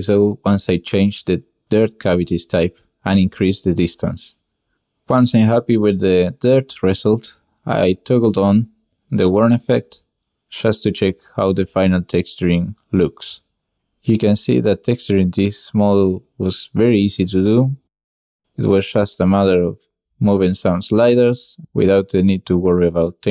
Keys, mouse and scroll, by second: 0.0-2.3 shift+middle drag, 5.0 click, 5.3 click, 6.5 drag, 6.8 shift+click, 7.8-8.2 drag, 8.9 middle drag, 9.1 click, 10.0-10.4 drag, 10.5 shift+click, 10.6 click, 12.0-13.1 drag, 13.5-15.7 drag, 16.3 click, 18.9 click, 20.5-21.8 drag.